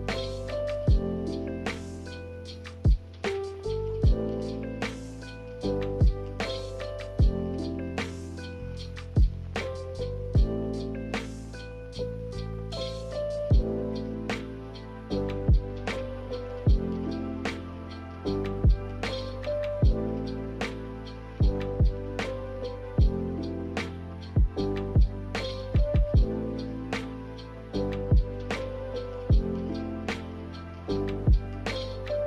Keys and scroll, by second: 0.4 Delete, 3.6 Delete, 6.3 1, 29.3 Delete.